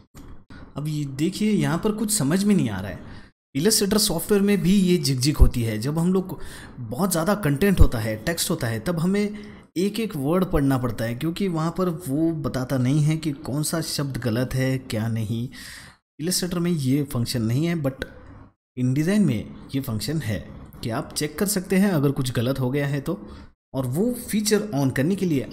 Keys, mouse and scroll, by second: 0.0 space, 0.4 scroll up 2, 0.4-1.0 scroll down 2, 1.6 space, 1.7 click, 2.1 space.